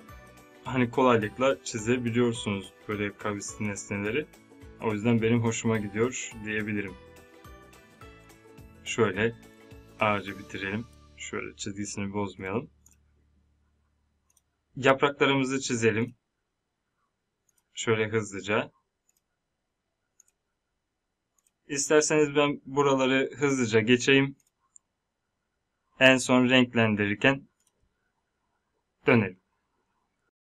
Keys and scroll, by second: 30.2 space.